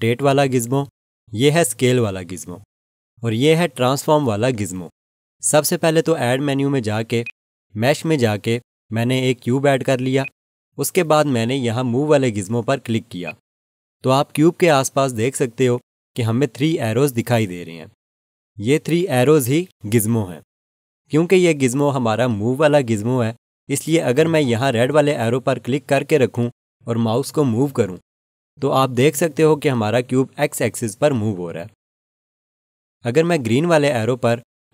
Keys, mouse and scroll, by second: 7.2 click, 13.2 click, 25.9 click.